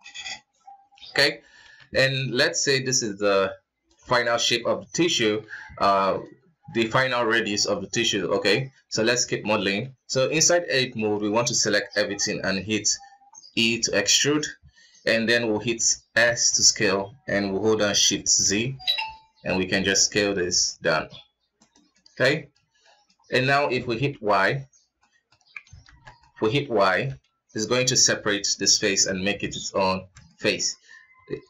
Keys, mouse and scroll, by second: 1.0 scroll up 2, 1.3 KP_1, 2.4-3.7 drag, 3.7-4.6 middle drag, 4.6 scroll down 1, 4.7-8.0 middle drag, 8.0-8.5 scroll up 2, 8.5 middle click, 8.9 Tab, 9.3-10.1 scroll down 1, 10.1-12.8 middle drag, 12.8 e, 16.1 s, 21.6-22.9 middle drag, 22.9-23.8 scroll up 1, 23.8 y, 24.7 middle click, 25.5 alt+KP_3, 25.9 middle click, 26.7 y, 27.6 g, 29.2-30.7 middle drag, 30.7 s.